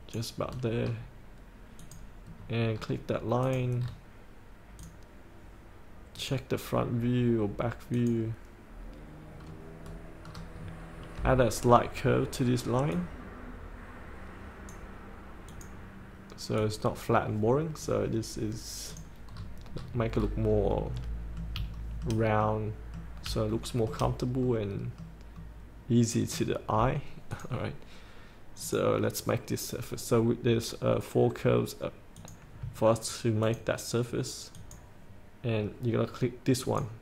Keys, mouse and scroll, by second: 0.6-1.0 scroll up 1, 1.9 click, 2.4 scroll down 1, 2.8 scroll up 1, 3.0 scroll down 1, 3.5 click, 3.9 scroll down 1, 4.9 click, 9.5-10.0 scroll down 1, 10.7 scroll down 1, 13.1-18.0 drag, 19.5 scroll up 1, 20.9 middle click, 22.0 shift+middle click, 22.5 middle click, 23.8 shift+middle click, 24.7 middle click, 26.8-27.5 scroll down 1, 27.5 click, 33.5 ctrl+click, 34.7 ctrl+click, 36.7 ctrl+click.